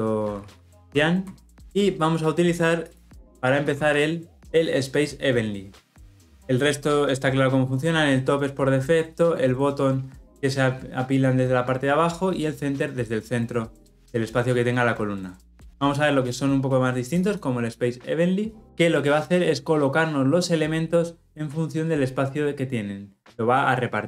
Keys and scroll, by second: 1.1 Return, 18.6 ctrl+shift+5.